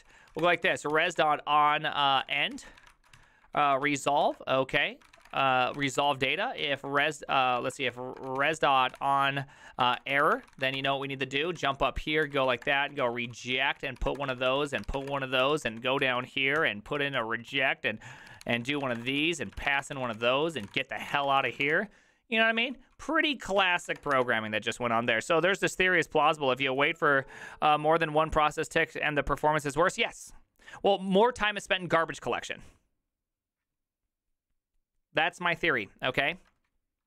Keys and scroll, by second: 0.0-24.5 typing, 2.2 Tab, 4.8 Tab, 9.8 Tab.